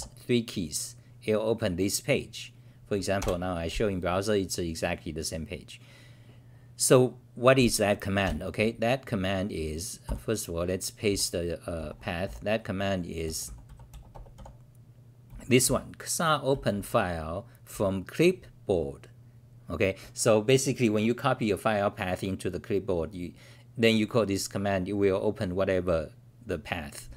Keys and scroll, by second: 3.3 ctrl+r, 8.2 ctrl+w, 10.0 k, 11.1 t, 11.7 Return, 12.2 c, 15.3 w, 15.6 t, 16.5 r.